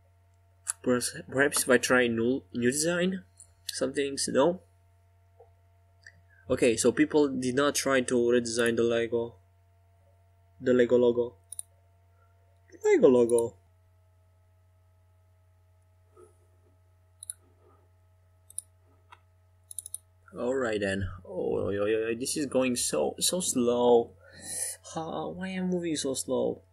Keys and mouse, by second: 1.5 Tab, 3.0 ctrl+r, 8.8-9.9 middle drag, 14.3-19.3 middle drag, 16.8-18.7 right drag, 18.7-22.8 drag, 19.3-23.3 right drag, 22.8-24.3 middle drag, 26.2-26.7 middle drag.